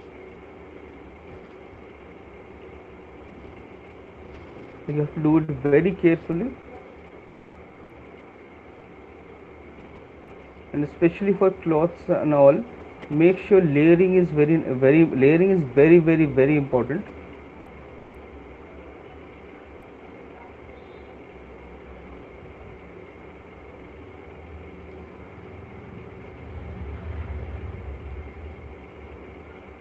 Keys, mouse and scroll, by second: 1.4 middle click, 1.4 right click, 5.7 alt+click, 5.7 right click, 6.0 right click, 8.7 click, 10.4 click, 10.7 alt+click, 11.5 click, 12.9 click, 13.5 click, 14.5 click, 15.8 click, 16.6 click, 17.9 click, 20.5 click, 28.0 click, 29.0 click.